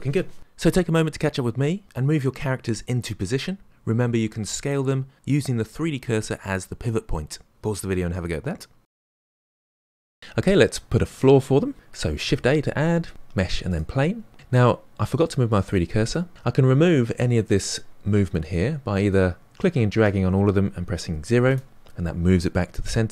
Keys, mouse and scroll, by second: 0.0-10.2 middle drag, 10.2-10.6 scroll down 1, 10.6-12.3 middle drag, 12.3 shift+a, 14.3-17.9 middle drag, 19.0-22.0 drag.